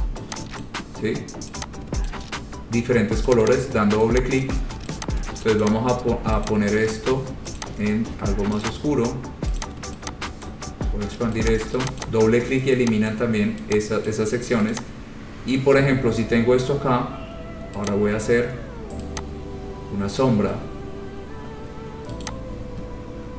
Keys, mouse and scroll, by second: 0.0 click, 0.8 click, 2.3 click, 3.5 click, 3.6 click, 4.6 click, 5.7 click, 5.8 click, 6.6 click, 7.8 click, 8.9 click, 9.8 click, 10.7 click, 11.8 click, 12.1 click, 12.2 click, 13.3 click, 14.3 click, 14.9 click, 15.2-15.8 scroll, 16.2-16.6 scroll, 18.1 click, 20.4 click, 22.6 click.